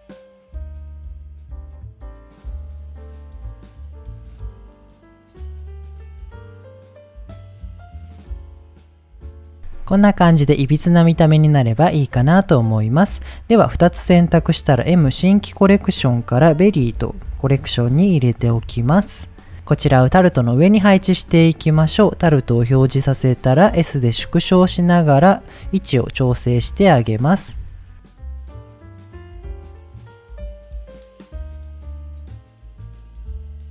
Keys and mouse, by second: 0.0-3.5 typing, 0.0 click, 0.2 click, 0.4 click, 0.6 click, 0.9 middle click, 1.6 click, 1.8 click, 2.0 click, 2.3 click, 2.5 click, 2.6 middle click, 3.2 click, 3.6 click, 3.8 middle click, 4.8 g, 5.3 right click, 5.6 click, 6.0 click, 6.1 g, 6.4 click, 6.7 click, 6.8 g, 7.2 middle click, 7.7 click, 7.7 g, 8.0 click, 8.1 g, 8.2 click, 8.4 middle click, 8.6 middle click, 8.8 middle click, 9.1 Tab, 9.3 middle drag, 10.0-10.4 middle drag, 10.6-10.9 middle drag, 11.1 middle drag, 11.7-12.1 middle drag, 12.2-12.5 middle drag, 13.2 click, 14.7 m, 17.4 r, 18.6 Return, 20.9 click, 21.3 click, 22.6 s, 23.8 click, 24.2 g, 24.2 z, 25.6 click, 26.5 KP_7, 27.5-33.7 typing, 28.0 middle click, 28.2 click, 29.0 click, 29.3 click, 29.7 middle click, 30.0 click, 30.2 middle click, 30.4 middle click, 30.7 click, 30.8 middle click, 31.0 click, 31.3 middle click, 31.8 middle click, 32.4 click, 32.4 middle click, 32.6 click, 32.8 middle click, 33.0 middle click, 33.3 middle click, 33.4 click, 33.5 middle click.